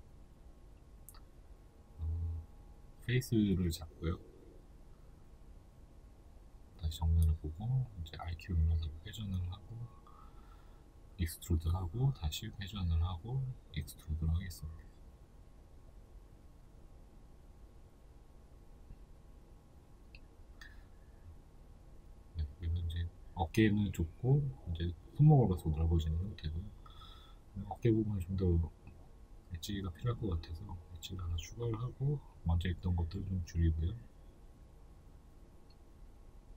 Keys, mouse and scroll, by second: 0.3-1.8 middle drag, 1.5 3, 2.1 right click, 2.5 right click, 2.9-15.1 middle drag, 4.5 KP_1, 6.8 r, 15.1 click, 15.5 s, 16.5-23.8 shift+middle drag, 17.1 e, 18.7 r, 22.9-23.2 scroll up 2, 23.8 right click, 24.6 ctrl+r, 26.8 g, 28.4 click, 28.7 right click, 28.9 alt+right click, 30.7 s, 31.6 click, 32.6 s, 33.2 click, 33.4 g, 34.4 shift+middle click, 34.9 right click, 35.2 alt+right click, 36.1 g.